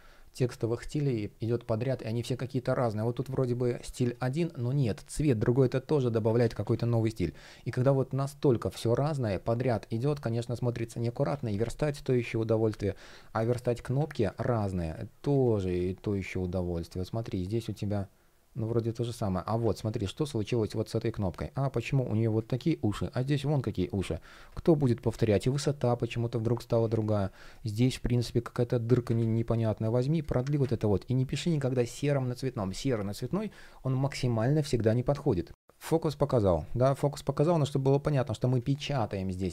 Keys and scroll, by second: 6.0 super+z, 14.4 shift+Return, 15.3 super+c, 19.4 super+v, 21.3 shift+p, 23.9 super+z, 26.3 super+z, 27.0 shift+p, 28.8 super+z, 30.3 super+z.